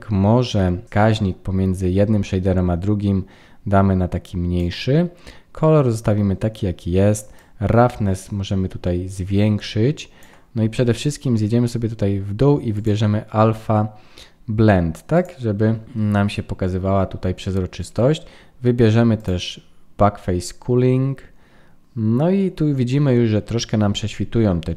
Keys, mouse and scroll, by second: 7.3 click, 11.0-12.7 scroll down 9, 12.7 click, 12.7-13.2 scroll down 1, 19.1 click.